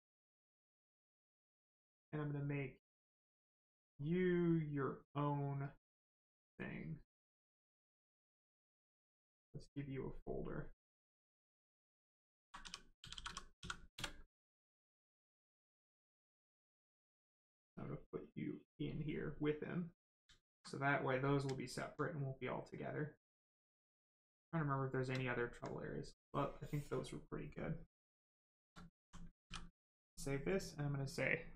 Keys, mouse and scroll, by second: 5.1 click, 5.6 click, 13.1 t, 13.5 n, 17.4 click, 21.1 alt+right click, 22.0 right click, 22.1 right click, 25.2 alt+right click, 26.1 click, 26.1 click, 29.4 ctrl+s, 30.6 click.